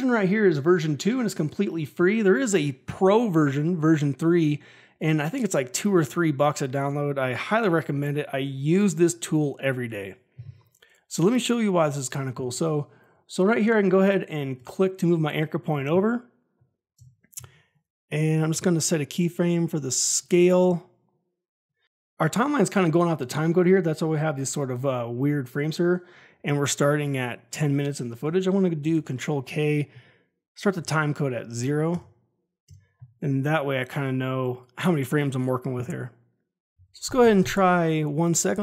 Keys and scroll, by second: 16.9 Home, 17.3 s, 28.7 ctrl+k, 30.7 ctrl+a, 31.5 0, 31.8 Return, 36.6 Home, 37.0 shift+Page_Down.